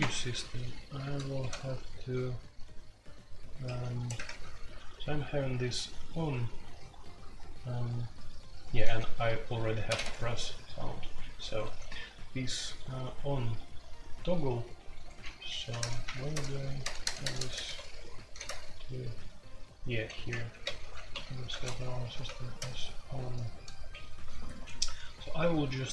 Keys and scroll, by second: 1.0 ctrl+d, 1.6-2.3 typing, 3.9-10.0 typing, 11.4 typing, 15.3-18.4 typing, 16.0 Return, 19.7-25.9 typing.